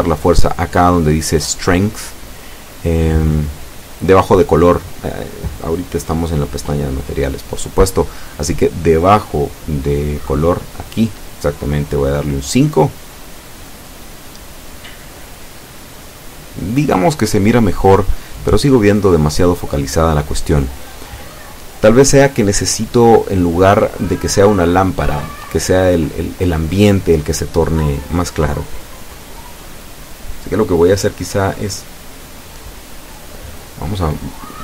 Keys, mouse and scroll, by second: 1.1 F12, 17.2 Escape, 18.9 click, 19.9 KP_5, 20.1 KP_Enter, 20.4 F12.